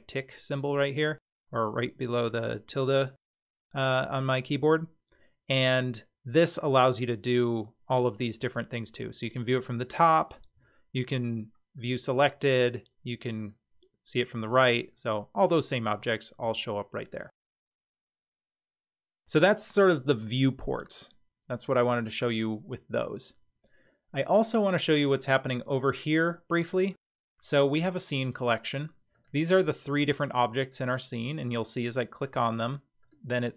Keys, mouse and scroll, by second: 10.6 `, 12.6 `, 14.4-14.9 scroll down 7, 14.9-15.8 middle drag, 15.9-16.6 scroll down 3, 16.6-17.2 shift+middle drag, 17.8-18.3 scroll up 2, 18.5-18.8 shift+middle drag, 18.9-19.7 scroll up 1, 29.1 click, 29.7 click, 30.6 click, 31.5 click, 32.2 click, 33.0 click.